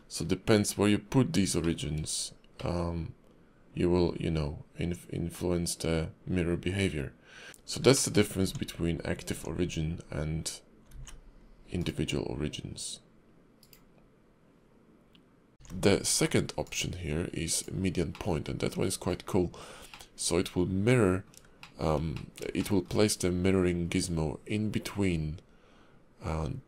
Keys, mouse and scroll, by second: 15.5 alt+x, 15.5 shift+middle click, 15.5 shift+click, 16.6 click, 18.1 middle click, 19.9 middle click, 21.6 shift+middle click, 22.1 middle click, 22.6 shift+middle click, 23.0-24.6 scroll up 2.